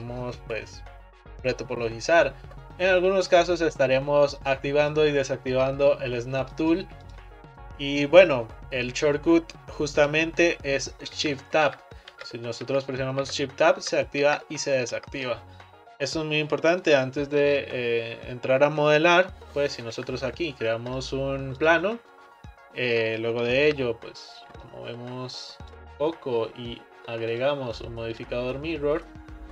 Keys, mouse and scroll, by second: 4.5 click, 4.9 click, 6.6 click, 7.1 click, 11.2 shift+Tab, 11.7 shift+Tab, 12.7 shift+Tab, 13.3 shift+Tab, 13.8 shift+Tab, 14.3 shift+Tab, 15.0 shift+Tab, 19.9 shift+a, 23.1 middle click, 23.7 Tab, 24.7 click, 27.3 click.